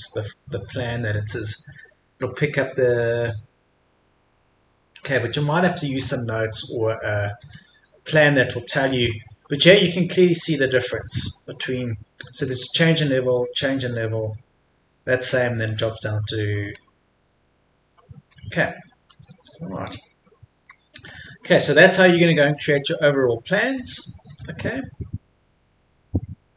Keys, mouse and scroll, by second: 8.2-9.1 scroll down 1, 9.1 middle click, 9.9-10.8 scroll up 1, 16.7-18.0 scroll down 1, 18.0 middle click, 18.7 scroll down 1, 18.9 Escape, 19.7 middle click, 21.1-21.5 scroll up 1, 22.0-22.7 scroll down 1, 24.3 click, 24.5-25.5 scroll up 1, 25.5 scroll down 1.